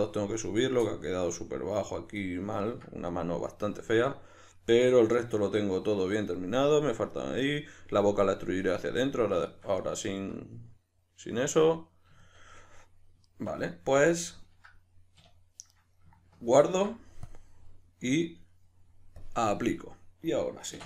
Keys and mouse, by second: 14.0 Tab, 15.2 \, 16.6 ctrl+s, 19.2-20.8 drag, 20.7 \.